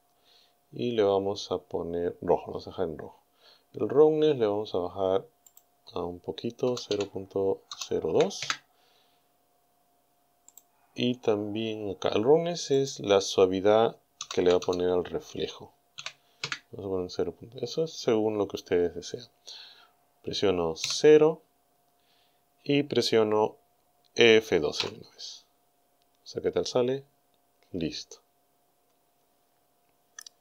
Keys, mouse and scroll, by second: 5.5 click, 6.7 KP_0, 6.9 KP_Decimal, 7.7 KP_0, 8.2 KP_2, 8.4 KP_Enter, 10.5 right click, 12.8 click, 14.2 KP_0, 14.4 KP_Decimal, 14.6 KP_0, 16.0 KP_2, 16.4 KP_Enter, 20.8 KP_0.